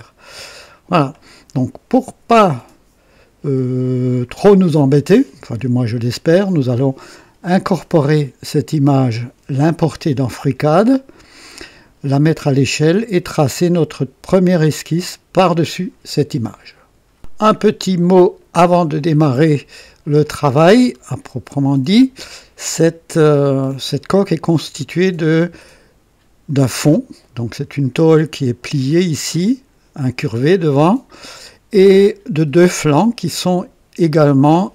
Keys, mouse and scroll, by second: 0.0 click, 18.0-23.9 drag, 24.0-24.8 right drag, 28.5 click, 31.4-33.9 drag, 34.0 click.